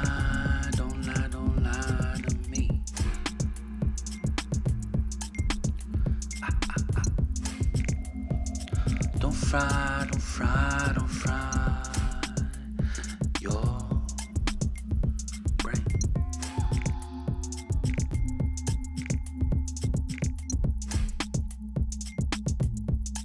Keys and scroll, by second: 2.1 ctrl+z, 5.7 Up, 5.8 Up, 5.9 Up, 6.0 Up, 6.3 Left, 6.5 Up, 7.1 Right, 15.0 ctrl+g, 16.1-17.5 typing, 19.4 Delete, 20.7 ctrl+g, 22.4-23.2 typing.